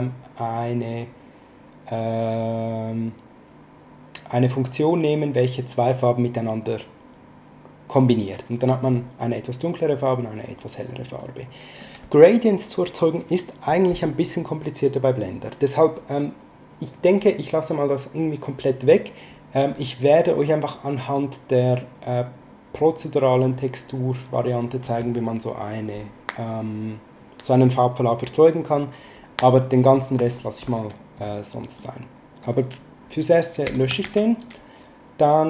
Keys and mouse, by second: 11.2 click, 20.4 click, 31.7 click, 33.6 x, 34.0 shift+a.